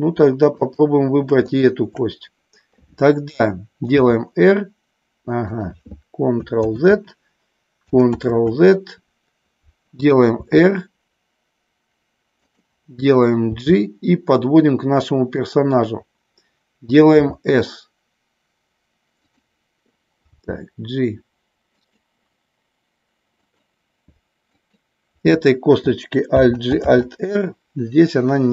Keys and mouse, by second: 0.6-1.6 shift+drag, 4.0 r, 5.4 click, 6.6 ctrl+z, 8.1 ctrl+z, 10.3 r, 12.5 click, 13.6 g, 17.1 s, 19.2 click, 20.2 g, 21.7 click, 23.3 click, 24.6 click, 26.2 alt+g, 26.7 alt+r.